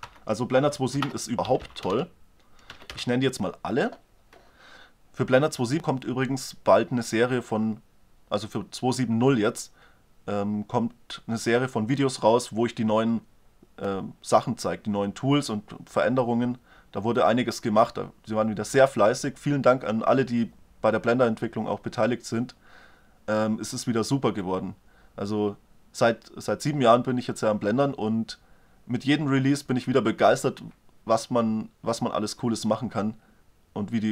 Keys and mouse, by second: 1.6 l, 1.6 BackSpace.